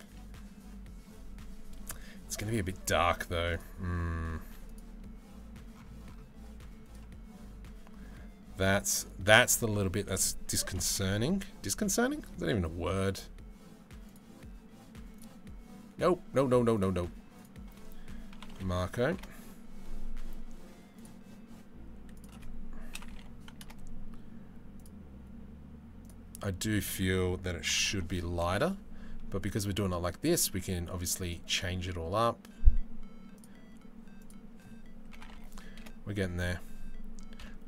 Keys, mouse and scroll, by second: 4.3-6.4 middle drag, 8.4-12.0 drag, 17.0-18.8 drag, 20.5 click, 21.7-23.3 drag, 33.0 click, 33.8 click, 37.1 KP_Decimal.